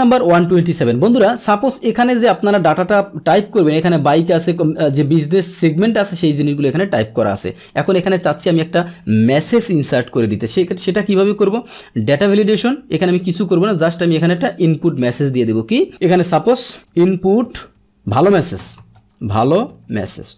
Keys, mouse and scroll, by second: 0.0 alt+Tab, 1.1 click, 2.5 click, 4.0 click, 4.6 click, 5.0 click, 6.3 click, 7.8 click, 10.1 ctrl+shift+Down, 11.9 click, 14.6 click, 15.1-15.4 drag.